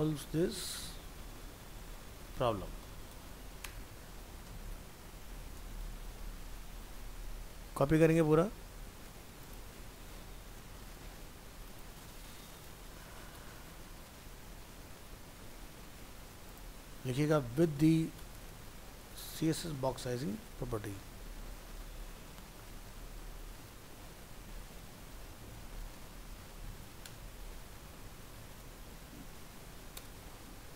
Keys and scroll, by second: 5.9 ctrl+s, 12.2 ctrl+c, 13.9 ctrl+v.